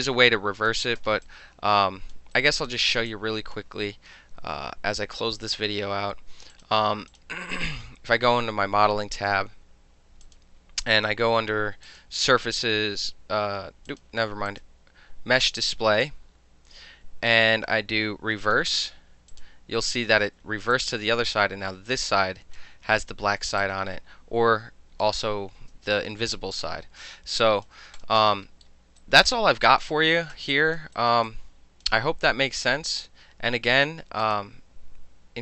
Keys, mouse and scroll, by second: 1.3 alt+click, 2.2 alt+middle click, 2.4 alt+right click, 3.1 alt+click, 5.0-6.6 middle drag, 6.6 click, 6.7 middle click, 7.2 click, 10.3 click, 11.0 click, 11.9 click, 13.9 click, 14.5 click, 18.5 click, 19.4 click, 20.8-22.6 alt+drag, 23.6-25.1 alt+drag, 26.1 alt+middle click, 26.6 alt+click, 27.0 alt+middle click, 27.4 alt+click, 27.7 alt+middle click, 28.0 alt+click, 28.5 alt+middle click, 29.0 alt+right click, 30.6 alt+drag, 31.0 alt+right click, 31.3 alt+click, 34.3 click.